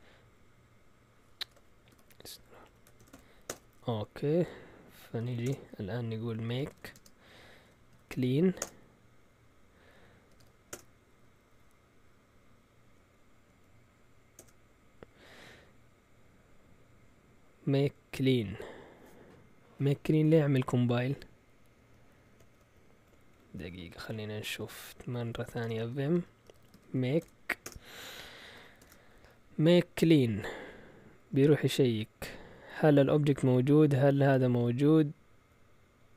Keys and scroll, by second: 1.4-11.2 typing, 2.6 Escape, 12.9 Up, 12.9-14.8 typing, 20.4 Up, 20.9 Up, 21.7 Up, 22.3 Down, 22.5 Down, 22.7 Down, 23.1-23.4 typing, 25.2-27.4 typing, 27.6 Return, 28.8 shift+g, 31.1 Up, 31.4 Up, 31.9 Right, 31.9-33.8 typing, 33.9 Right, 34.0 Right.